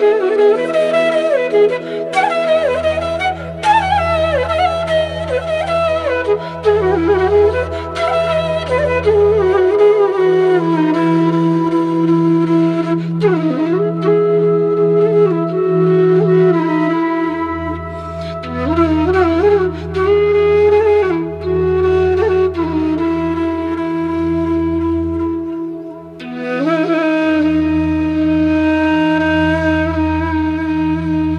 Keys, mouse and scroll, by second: 1.9 click, 3.1-3.7 scroll down 1, 3.7 click, 6.2 shift+click, 9.1 click, 10.3 click, 14.3 ctrl+z, 14.9 click, 15.1 ctrl+z, 15.4 click, 17.6 alt+scroll down 1, 18.5 alt+scroll up 1, 18.6-21.1 drag, 22.4 alt+scroll up 1, 22.7 click, 23.0 ctrl+v, 23.6 alt+scroll up 1, 24.9 click, 26.4 click, 28.5 click, 30.0 click, 30.9 click.